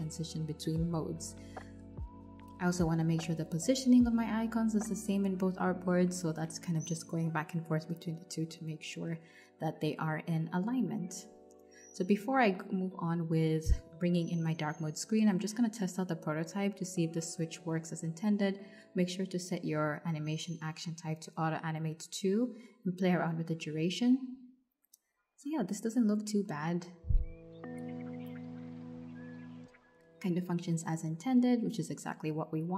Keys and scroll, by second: 2.0 alt+Left, 7.6 Left, 21.4-22.4 typing.